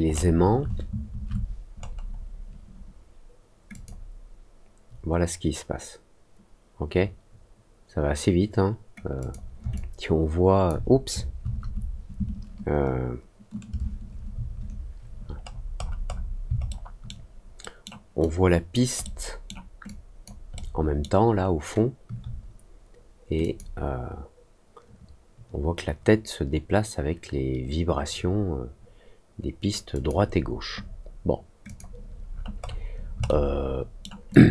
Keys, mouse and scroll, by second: 0.0 alt+scroll up 1, 1.7 middle click, 3.6 click, 9.1 click, 9.7 alt+click, 15.4 scroll down 1, 15.7 scroll up 1, 16.0 scroll down 1, 16.6 alt+middle click, 17.5 alt+middle click, 18.1 alt+click, 19.0 alt+middle click, 19.8 alt+click, 20.5 alt+middle click, 21.3 alt+middle click, 23.3 click, 29.9 click, 31.6 click, 32.2 middle click, 32.5 middle click, 33.2 alt+middle click, 34.2 alt+click.